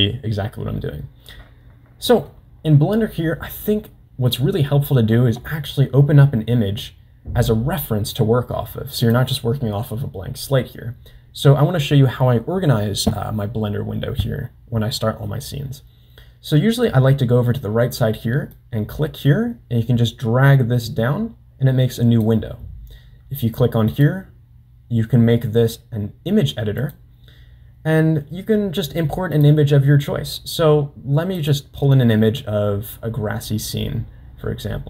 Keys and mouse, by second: 9.0 click, 18.6-22.2 drag, 24.0-26.9 drag.